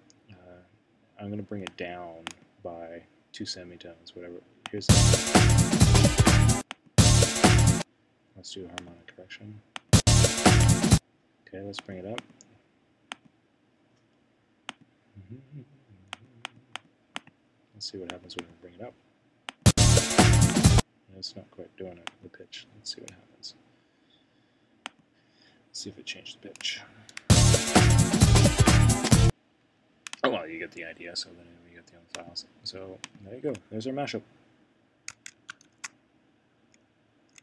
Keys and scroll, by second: 35.5 shift+super+4.